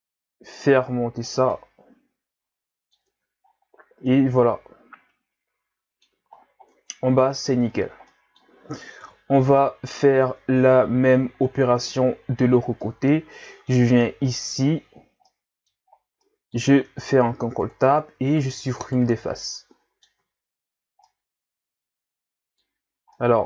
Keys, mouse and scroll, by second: 1.5-3.1 middle drag, 3.1 Tab, 3.4-4.1 scroll down 4, 4.1-6.3 middle drag, 6.3-6.7 scroll down 6, 6.7 Tab, 7.4 Tab, 7.7-8.1 scroll down 4, 8.1-9.0 middle drag, 9.0 KP_1, 10.0-11.3 scroll down 2, 12.6 scroll down 5, 12.8-13.9 middle drag, 13.9-14.3 scroll up 1, 14.3 Tab, 15.0 scroll up 2, 15.3 middle click, 16.2 middle click, 16.8 ctrl+Tab, 18.3 right click, 18.8 shift+right click, 19.4-22.8 middle drag, 22.8 scroll up 1, 23.1-23.4 middle drag.